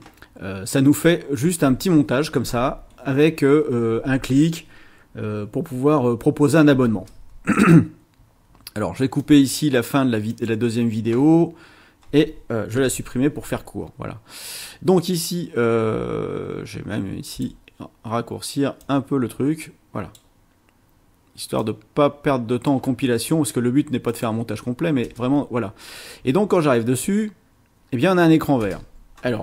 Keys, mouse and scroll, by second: 6.9 space, 9.2 click, 10.3 click, 12.8 Delete, 17.3 click, 18.8-20.3 drag, 21.6-22.8 drag, 24.1 click, 25.0 space, 28.6 space.